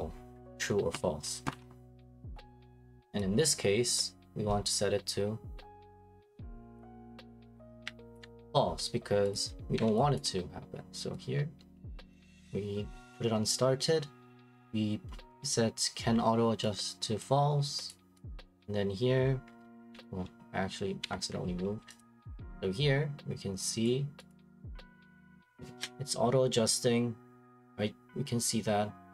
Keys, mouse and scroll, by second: 1.5 Escape, 3.4 click, 5.8 click, 7.0 click, 8.1 alt+click, 9.3 click, 9.8 Delete, 10.2 click, 10.4 middle click, 12.3 click, 17.2 click, 17.9 click, 18.3 click, 19.9 Escape, 21.0 Escape, 21.2 Escape, 22.0 click, 24.3 click.